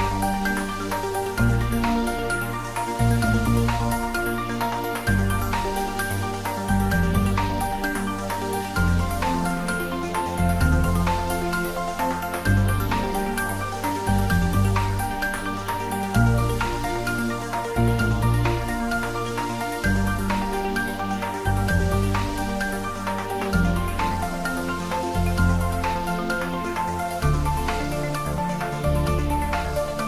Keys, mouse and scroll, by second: 2.7 click, 3.5 shift+d, 3.9 y, 11.6 click, 14.4 alt+shift+click, 15.6 alt+shift+click, 16.6 d, 17.5 y, 19.9 click, 21.0 3, 22.1-23.1 typing, 23.6 click, 23.9 scroll down 1, 24.5-29.4 middle drag, 29.6-30.0 scroll down 1.